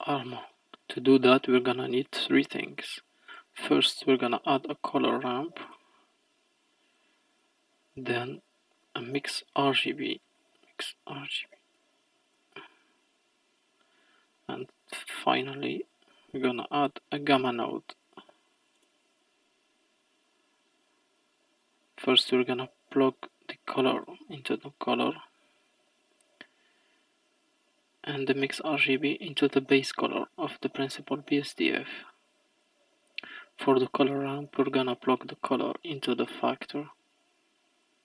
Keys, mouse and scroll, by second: 0.2 click, 2.6 shift+a, 7.3 click, 7.8 middle click, 8.4 click, 8.8 shift+a, 13.9 middle click, 14.6 click, 15.4 shift+a, 21.9 click, 24.7-26.8 middle drag, 26.8 click, 30.1-32.2 middle drag, 32.2-35.2 drag, 35.4-37.0 drag.